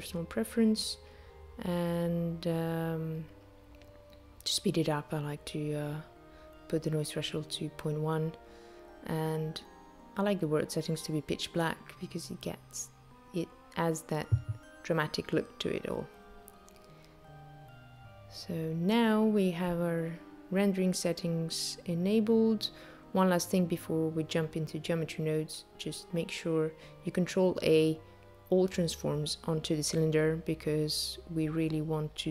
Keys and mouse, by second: 3.1 click, 7.6 right click, 9.7 click, 11.1 click, 21.7 click, 24.1 click, 25.3 ctrl+a.